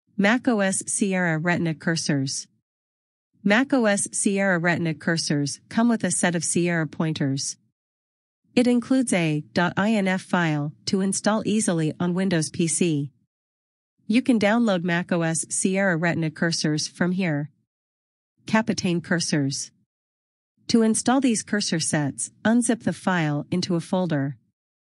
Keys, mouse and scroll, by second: 12.5 click, 22.6 click.